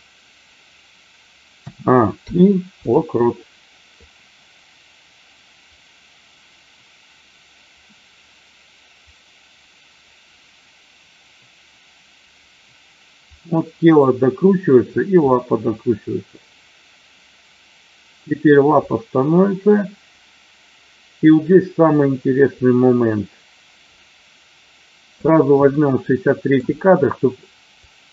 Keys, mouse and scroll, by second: 1.6 a, 2.2 i, 4.0-25.2 drag, 25.7 shift+middle click, 27.7-28.1 drag.